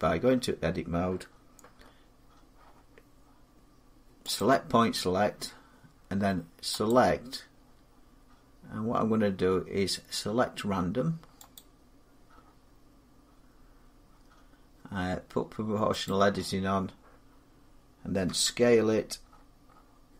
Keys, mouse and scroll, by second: 4.1 click, 6.6 click, 11.3 click, 15.8 click, 18.0 s, 19.0-20.1 scroll up 11, 20.1 scroll down 2.